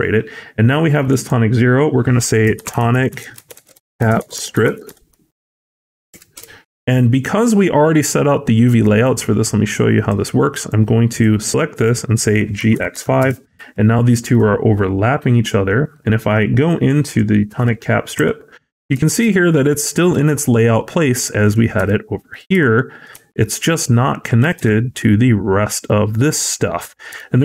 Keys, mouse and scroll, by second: 0.9 click, 1.0 click, 8.9 click, 10.7 l, 12.6 c, 14.3 v, 17.5 t, 20.9 v, 21.1 s, 21.7 t, 27.3 t, 27.3 v.